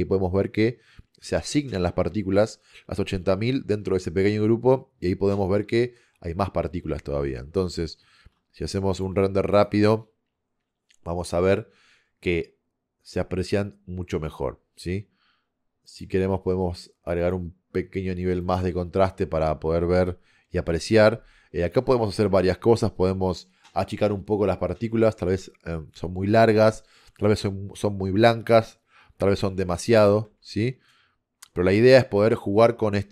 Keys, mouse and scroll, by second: 15.9 click.